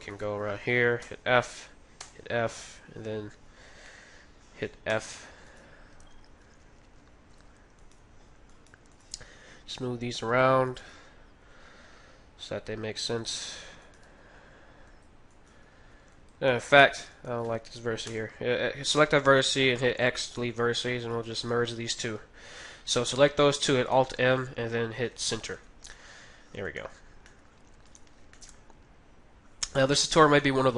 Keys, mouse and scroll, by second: 0.5-1.9 right drag, 0.9 f, 1.9 f, 3.9-6.4 middle drag, 4.9 f, 5.5-7.3 right drag, 6.4 g, 7.8-12.5 right drag, 8.0 g, 9.3 g, 10.9 g, 13.8-16.1 right drag, 14.0 g, 15.5 g, 16.2-18.9 right drag, 16.2 g, 18.1 x, 20.0-22.8 right drag, 23.9 alt+m, 25.5 Tab, 25.9-30.7 middle drag, 26.6 Tab, 27.9-29.5 right drag, 28.6 g.